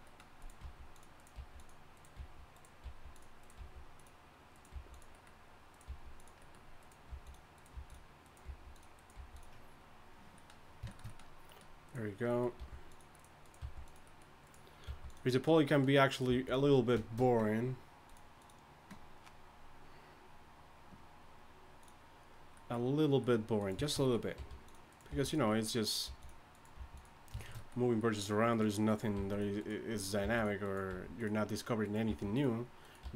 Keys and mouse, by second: 0.6 g, 1.3 g, 2.8 g, 3.6 g, 4.7 g, 5.1-6.5 drag, 5.9 g, 7.1 g, 7.7 g, 8.4 g, 9.1 g, 11.8-13.6 right drag, 12.6 g, 13.6 g, 14.0 right click, 14.8 g, 16.3 g, 22.4 middle click, 22.7 middle click, 23.3 middle click, 23.6 right click, 24.3 g, 25.1 g, 26.0 g, 26.8 g, 29.1 g, 30.2 g, 30.9 g, 32.1-33.1 typing.